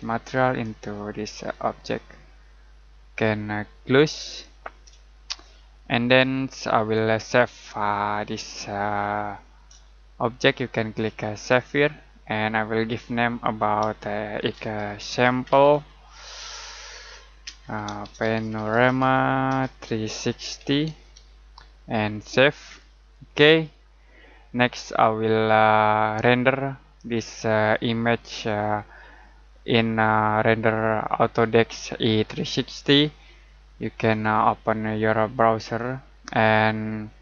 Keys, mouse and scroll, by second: 4.2 click, 5.1 middle click, 9.8 middle click, 11.4 click, 14.1-16.4 typing, 17.4-21.5 typing, 22.6 click, 34.0 click.